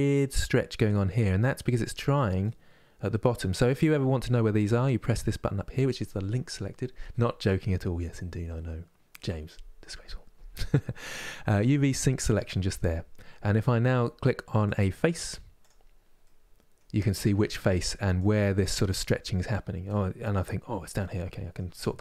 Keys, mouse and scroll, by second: 2.2-14.3 middle drag, 14.3 click, 15.3 click, 15.9-18.7 middle drag, 18.7 click, 19.5-21.7 middle drag, 21.7-22.0 scroll up 2.